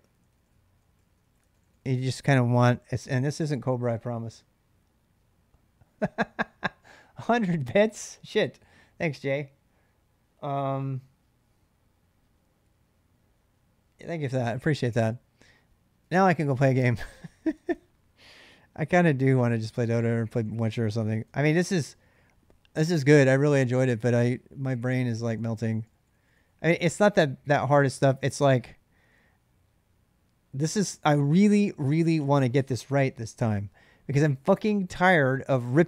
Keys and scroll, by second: 0.0-2.7 typing, 15.9 ctrl+[, 16.1-18.0 typing, 16.6 Return, 19.3-22.2 typing, 25.2-26.2 typing.